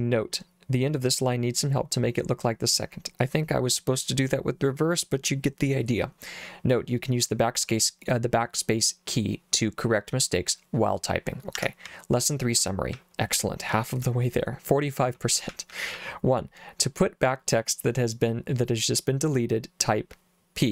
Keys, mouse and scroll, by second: 11.6 Escape, 11.9 k, 13.0 j, 14.1 j, 15.5 j, 15.7 j, 16.0 j.